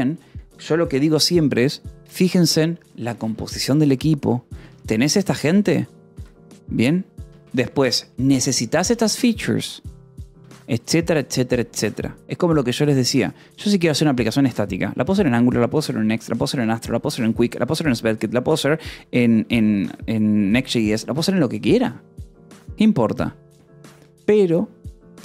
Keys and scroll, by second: 2.5 k, 3.1 j, 4.4 Escape, 4.6 k, 5.5 j, 6.0 Escape, 7.1 k, 8.8 j, 10.3 Escape, 10.5 k.